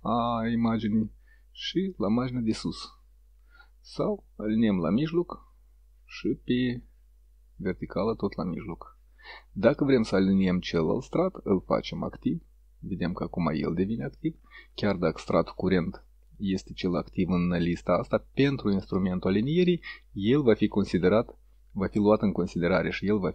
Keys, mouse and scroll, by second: 2.5 click, 4.8 click, 7.8 click, 11.0 click.